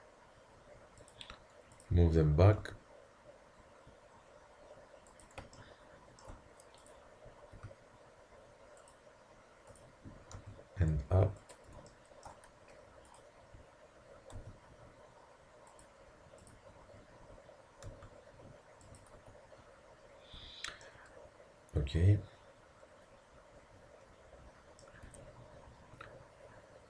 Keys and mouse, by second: 1.8-3.6 drag, 2.6 g, 6.8-7.5 middle drag, 7.5-8.7 drag, 7.5 g, 8.6-9.7 middle drag, 9.7-11.6 drag, 10.4 g, 11.4-12.3 middle drag, 13.1-18.3 drag, 14.4 g, 17.9 g, 19.2 z, 19.8-20.4 middle drag, 20.4 Tab, 25.1 Tab.